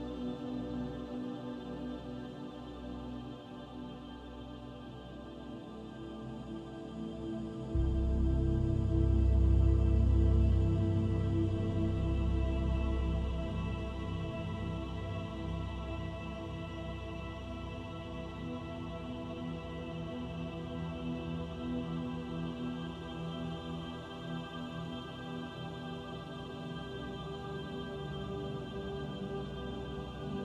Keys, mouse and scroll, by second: 0.3 s, 2.6 scroll up 3, 3.3 scroll up 3, 3.4 shift+middle click, 4.6 s, 6.7 s, 10.0 middle click, 11.7 Tab, 12.9 ctrl+r, 19.5 ctrl+r, 23.4 middle click, 24.2 Tab, 25.5 Tab, 26.4 click, 27.2 click, 27.6 shift+click, 27.9 shift+click, 28.0 click, 28.7 click, 29.0 shift+click, 29.6 middle click.